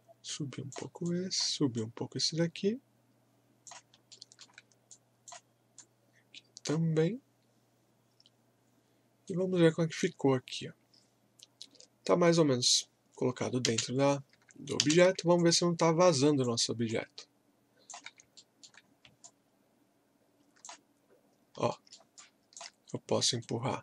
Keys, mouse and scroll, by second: 4.1 alt+middle click, 4.9-9.1 drag, 9.2-11.7 right drag, 11.7-12.1 scroll down 1, 12.2-12.7 scroll up 1, 13.6 space, 14.8 space, 15.4-18.4 alt+drag, 18.4 alt+middle click, 18.9 scroll up 1, 19.2-21.1 alt+drag, 21.1 scroll up 1, 21.7 alt+middle click, 22.2 alt+click, 23.4-23.8 right drag.